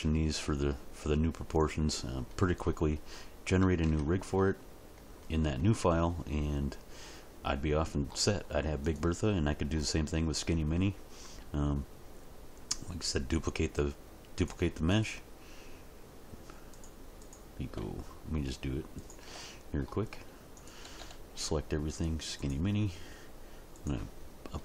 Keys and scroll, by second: 3.8 Tab, 20.8 a.